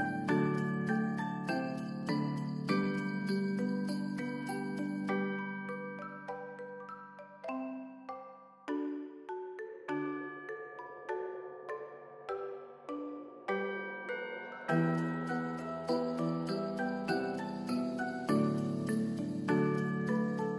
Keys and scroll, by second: 2.2 ctrl+s, 10.6 u, 11.2 ctrl+s, 15.2 alt+z, 17.6 ctrl+s, 20.0 =.